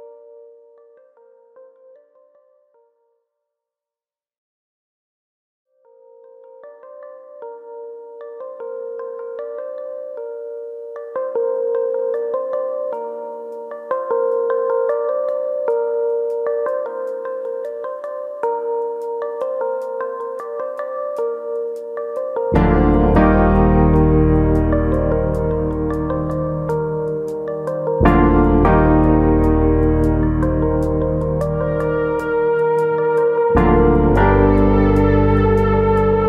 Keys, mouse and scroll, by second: 0.1 click, 1.5 r, 2.3 click, 2.8 click, 4.2 r, 6.0 click, 6.4 click, 7.0 s, 7.6 click, 8.2 click, 12.1 click, 13.3 3, 14.0 alt+shift+click, 15.0 click, 16.6 click, 18.3 ctrl+KP_Subtract, 19.7 click, 20.9 click, 24.4 3, 24.7 2, 25.5 alt+click, 26.6 click, 28.3 alt+click, 29.0 click, 31.7 click, 32.0 l, 32.9 shift+d, 34.9 click.